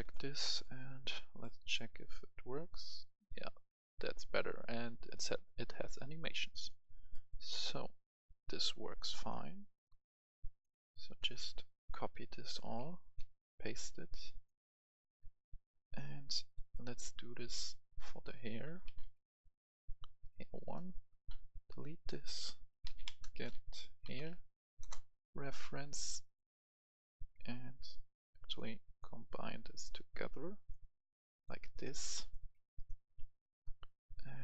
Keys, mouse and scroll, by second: 6.7 click, 7.1 right click, 7.5-8.0 scroll down 1, 8.8 click, 12.6 ctrl+right click, 13.1 click, 13.1 c, 14.0-16.2 drag, 16.2-16.5 scroll up 1, 16.5 right click, 17.7 click, 18.7-19.0 typing, 20.3 click, 21.2 Delete, 21.9 click, 22.8-24.2 typing, 24.8 Return, 25.9-32.0 drag, 32.1 right click, 32.4 scroll down 1, 32.8 right click, 33.7 click.